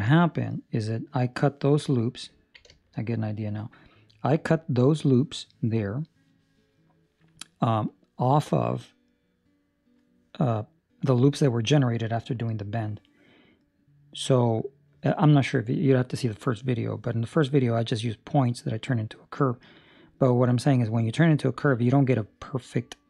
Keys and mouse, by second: 2.3 ctrl+middle click, 2.6 shift+middle click, 3.0 middle click.